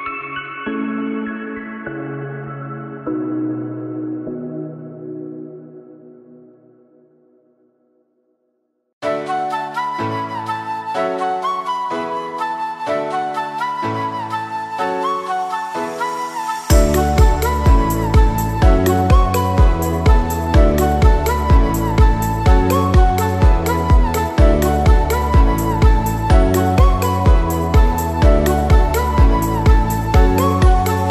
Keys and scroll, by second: 10.0 s, 15.6 F9.